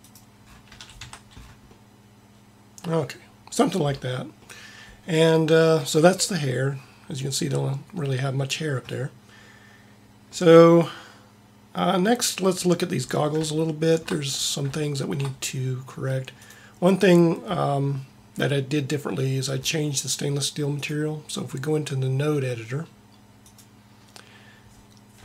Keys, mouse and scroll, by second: 0.6 a, 1.1 Tab, 16.6-18.2 right drag.